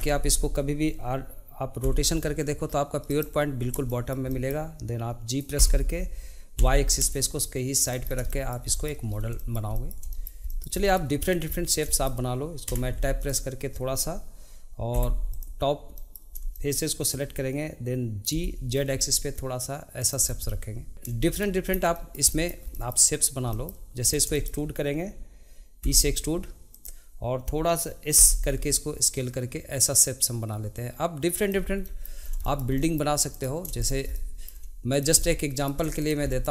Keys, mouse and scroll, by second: 1.8 r, 3.9-5.6 shift+middle drag, 5.6 g, 8.0 scroll down 2, 8.3-9.1 shift+middle drag, 9.1 scroll up 3, 9.3-11.2 shift+middle drag, 11.2 drag, 11.5-12.7 middle drag, 12.7 b, 16.0 middle click, 16.3 scroll down 1, 16.5-18.3 shift+middle drag, 20.2 scroll down 1, 20.4 middle click, 21.4 middle click, 21.7 scroll up 2, 21.9-24.0 shift+middle drag, 24.0 scroll down 2, 24.3-25.8 shift+middle drag, 31.8 middle click, 32.2 scroll up 1, 32.4 shift+middle click, 33.8 shift+click, 34.1 middle click, 34.9 shift+click, 35.2 middle click, 36.0 shift+click, 36.3 middle click.